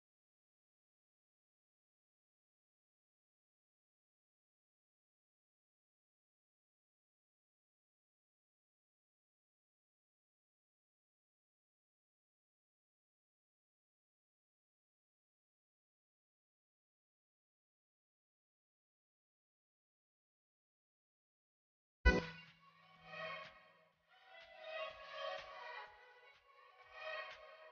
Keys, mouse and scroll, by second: 3.0 click, 5.2 click, 5.4 click, 12.1 click, 17.1-21.4 drag, 21.4 s, 23.5-26.6 drag, 26.6-27.3 scroll down 1.